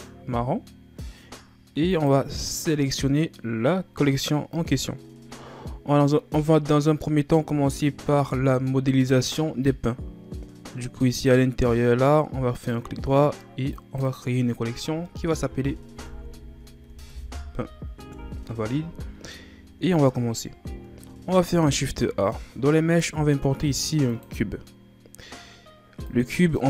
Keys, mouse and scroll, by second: 11.1-13.7 right drag, 13.7-18.1 drag, 19.9-20.5 ctrl+scroll down 2, 20.5 scroll up 2, 21.8 shift+a.